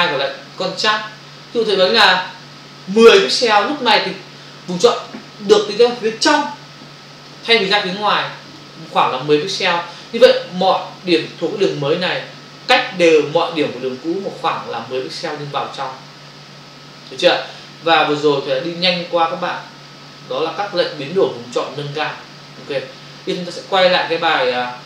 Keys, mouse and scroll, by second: 1.9 click, 3.0 1, 8.4 click.